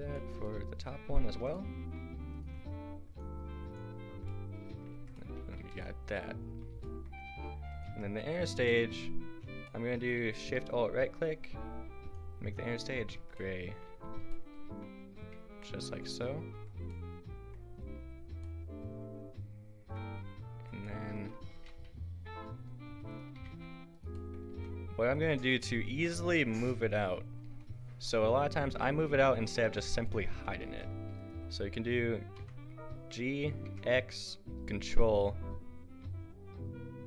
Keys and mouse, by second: 3.1-4.3 middle drag, 4.9 Tab, 5.6 a, 7.7 click, 7.9 Tab, 8.4 a, 8.8 click, 11.2-12.1 drag, 13.2 Tab, 13.9 a, 16.1 click, 16.5 Tab, 18.6-19.9 drag, 20.5 Tab, 21.6 g, 23.4 g, 24.5 g, 29.2-32.2 drag, 29.6 h, 30.7 ctrl+z, 32.4 g.